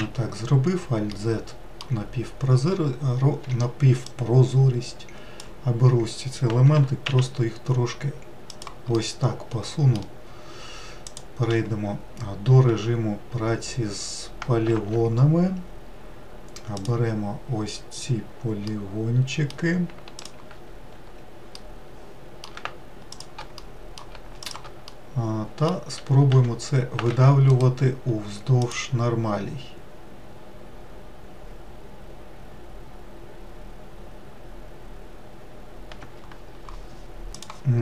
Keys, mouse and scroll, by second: 1.0-3.4 middle drag, 3.4 1, 4.0 click, 6.7 g, 8.9-11.0 middle drag, 11.0-12.6 drag, 12.6 3, 14.6 alt+z, 16.7 click, 18.6-20.1 middle drag, 20.1 ctrl+click, 21.5-23.0 middle drag, 23.0 shift+click, 23.5 middle click, 24.4 shift+click, 24.8-26.2 middle drag, 26.2 e, 28.6-30.6 right drag.